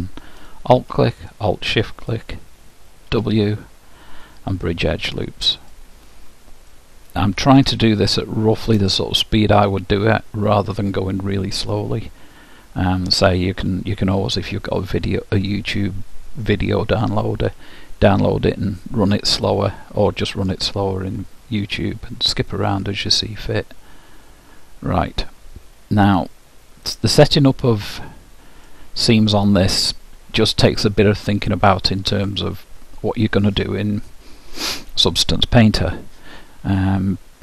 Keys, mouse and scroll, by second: 0.5-3.0 drag, 3.2 w, 6.7-10.7 middle drag, 17.5-19.3 middle drag, 20.8-21.5 scroll down 1, 21.5 scroll down 1, 21.7-24.9 middle drag, 28.7-30.6 middle drag.